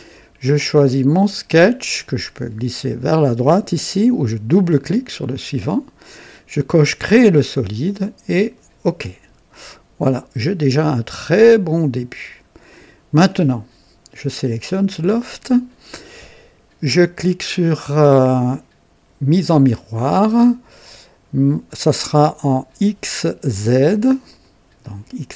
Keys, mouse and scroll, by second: 1.1 click, 2.9 click, 4.5 click, 6.9 click, 8.3 click, 9.5 click, 10.8 click, 12.2-12.5 scroll up 1, 12.7 right click, 14.5 click, 19.3 click, 24.2 click, 24.8 click.